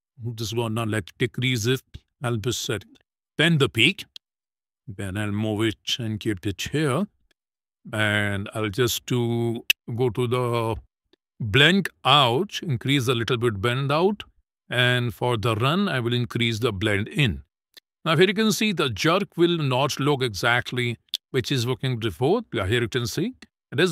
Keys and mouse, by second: 1.7-3.2 drag, 4.5 click, 5.0-6.5 drag, 6.9 click, 12.2-13.4 drag, 14.4 click, 16.2 click, 18.1 click, 19.1 click, 19.8 space, 22.0 space, 23.6 click.